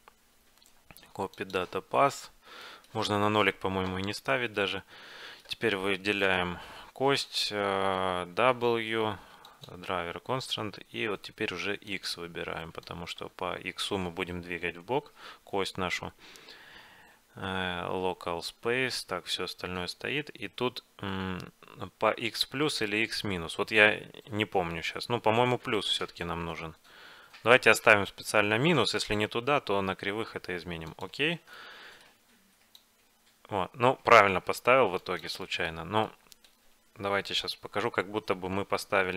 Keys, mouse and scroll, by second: 2.5-6.5 middle drag, 6.5-8.1 right drag, 8.6 w, 31.7-32.9 middle drag, 32.9-34.7 drag, 35.5-37.4 middle drag, 37.4 g.